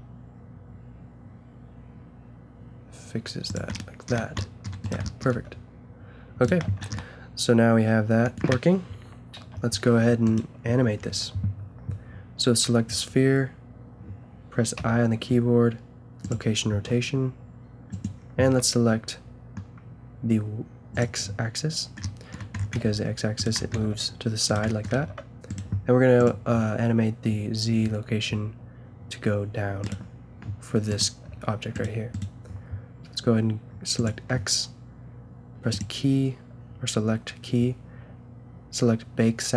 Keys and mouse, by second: 4.2 a, 5.3 g, 6.6 a, 9.4 KP_0, 11.0-12.6 drag, 14.8 i, 17.9 click, 18.5 a, 19.8-20.9 middle drag, 22.1-22.6 middle drag, 22.8 g, 23.7 g, 24.7-28.1 drag, 24.9 g, 28.3 g, 30.9-31.2 drag, 31.2 g.